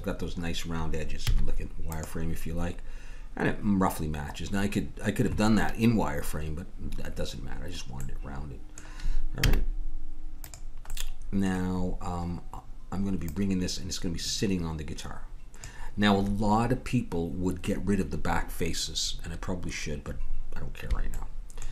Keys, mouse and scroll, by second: 1.3 z, 8.0-9.3 middle drag, 9.4 z, 11.1 middle click, 12.8 middle click, 13.3-15.1 drag, 21.2-21.7 middle drag.